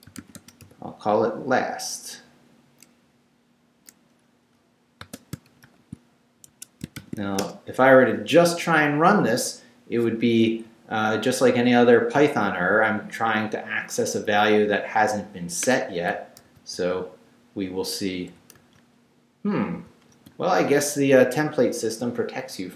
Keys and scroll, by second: 0.0-1.1 typing, 5.3 shift+space, 5.5 shift+], 6.5 shift+Escape, 6.7-7.7 typing, 16.4 super+r, 18.5 super+r, 19.9 super+r.